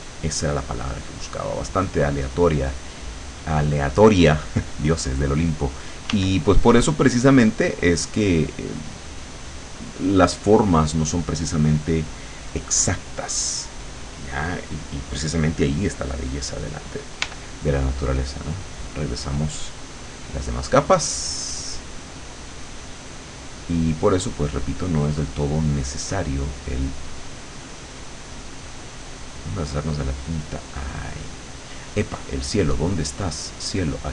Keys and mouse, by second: 1.6 click, 6.1 w, 6.6-10.0 drag, 17.3 l, 18.9 click, 19.7 click, 20.7-22.3 drag, 22.8 click, 23.2 click, 24.0 click, 25.5 click, 26.7 click, 27.2 click, 28.1 click, 29.5 click, 31.3 click, 32.4-33.9 drag.